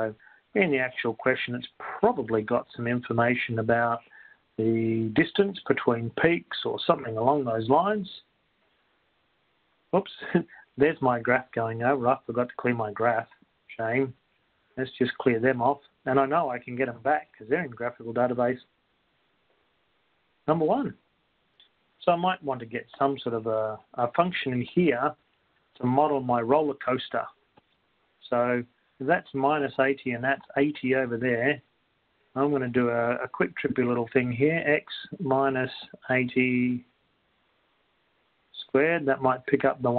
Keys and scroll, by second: 0.0-0.4 typing, 2.9 1, 4.9 5, 5.4 Down, 5.9 1, 6.6 0, 15.6 Up, 16.6 Down, 17.0 Up, 17.6 Down, 18.6 Up, 20.6 Up, 25.9 Down, 25.9 Up, 28.7-29.4 typing, 34.8-38.6 typing.